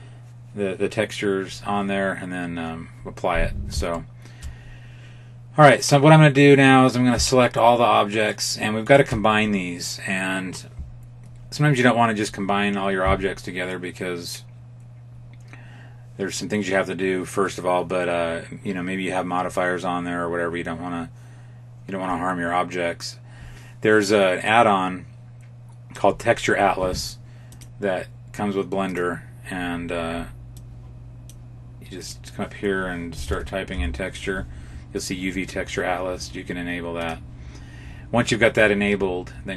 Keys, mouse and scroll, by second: 3.8 shift+middle click, 5.6 right click, 7.3 shift+right click, 8.1 right click, 8.9 shift+right click, 27.3 click.